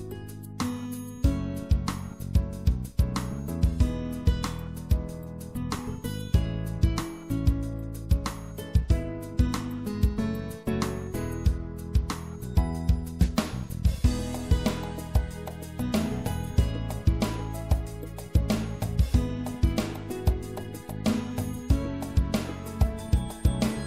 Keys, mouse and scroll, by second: 5.8 click, 6.2 middle click, 6.5-7.8 drag, 7.6 c, 7.8-10.1 middle drag, 12.9-14.5 drag, 14.5 middle click, 14.6 i, 18.6 e, 19.3-20.5 middle drag, 20.5-23.4 drag, 23.4-23.8 middle drag.